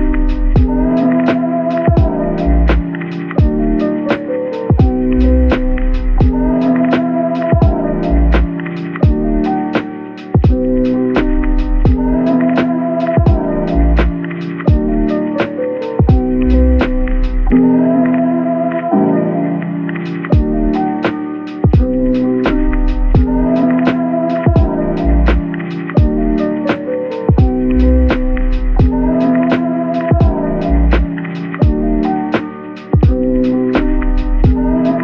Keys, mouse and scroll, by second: 0.0-0.8 typing, 1.8 typing, 8.7-9.1 scroll up 1, 15.0 Tab, 16.9 ctrl+r, 18.0-18.5 scroll up 1, 21.3 right click, 22.0 ctrl+r, 22.4 scroll up 1, 23.6 double click, 24.1 middle click, 25.6 typing, 26.4 Tab, 27.2-27.8 typing, 30.1 middle click, 32.0 shift+a, 33.1 typing.